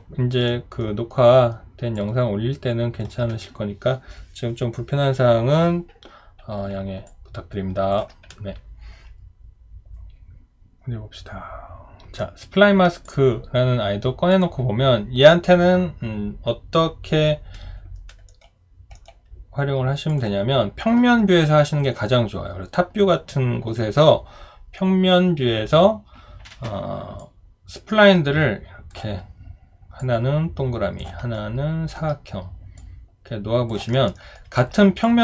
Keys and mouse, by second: 0.8 alt+middle click, 1.1 alt+right click, 1.9 alt+click, 7.1 alt+click, 31.3 alt+right click, 33.9 alt+middle click, 34.3 alt+right click.